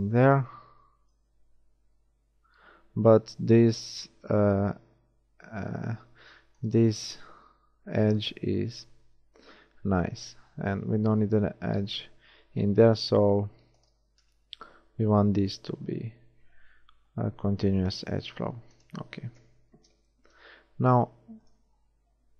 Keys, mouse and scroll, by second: 1.7 ctrl+shift+r, 7.3 ctrl+r, 14.6 ctrl+r, 19.3 KP_1, 19.7 middle click, 19.7 z.